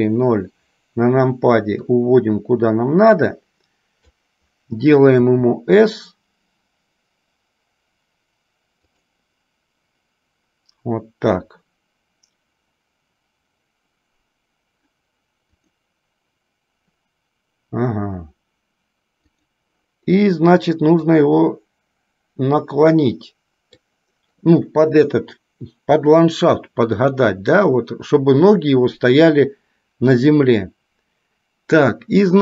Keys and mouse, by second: 2.2-4.4 drag, 15.8 click, 19.5 click, 21.2 click, 21.5-24.0 drag.